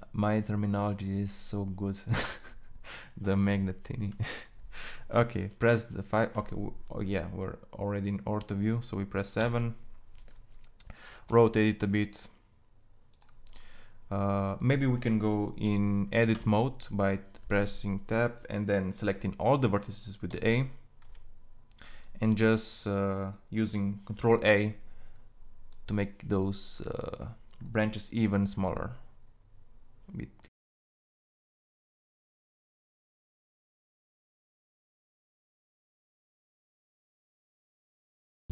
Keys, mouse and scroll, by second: 8.8 KP_7, 10.7 r, 15.8 Tab, 19.7 a, 20.4 a, 27.9 ctrl+a, 33.5 Tab.